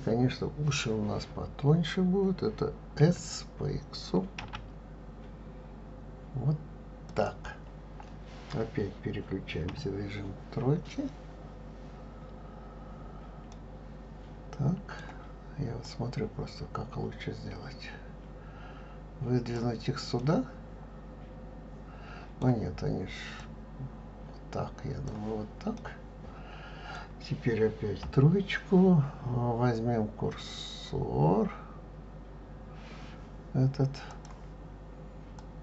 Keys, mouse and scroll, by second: 3.1 s, 9.7 KP_3, 13.5-15.9 middle drag, 15.9-18.9 drag, 20.2-23.2 middle drag, 23.4-25.8 drag, 25.8-28.0 middle drag, 28.0 KP_3, 34.2-35.6 drag.